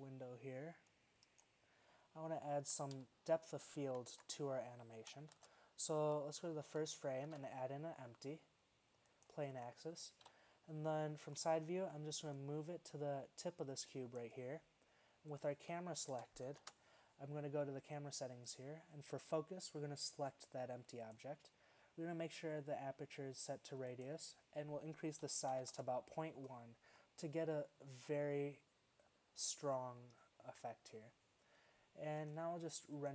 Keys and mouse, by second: 1.1 click, 1.9-2.8 drag, 2.8 z, 3.0 z, 4.2 alt+a, 5.4 shift+Left, 7.3 shift+a, 10.3 KP_3, 16.2 KP_0, 16.7 shift+z, 24.0-25.8 drag, 27.2 click, 27.3-29.2 middle drag, 32.3-32.7 drag.